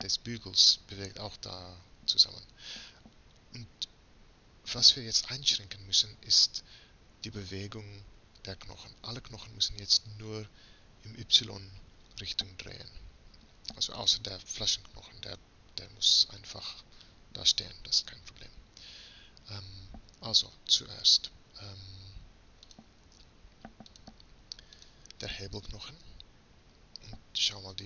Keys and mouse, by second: 12.4-14.4 middle drag, 14.4-17.1 right drag, 17.1 middle click, 22.7-26.6 drag, 26.6-27.8 middle drag.